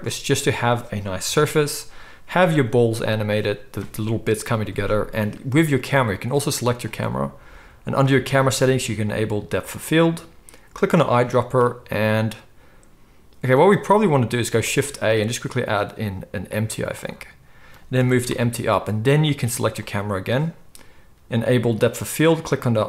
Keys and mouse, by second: 0.0 Tab, 0.0-2.2 middle drag, 0.0 KP_0, 1.2 KP_0, 6.4 click, 9.6 click, 10.0 middle click, 10.8 click, 14.6 shift+a, 17.9 g, 19.8 click, 21.0-22.8 middle drag.